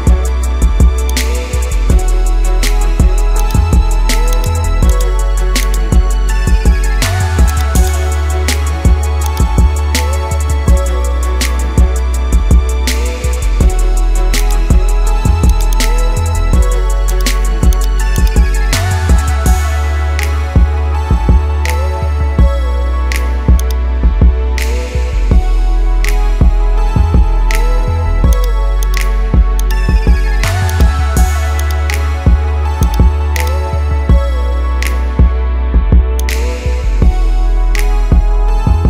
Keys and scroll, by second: 6.3 ctrl+z, 8.3 ctrl+0, 16.2 ctrl++, 24.6 ctrl+0, 26.5 ctrl++, 37.1 ctrl+0.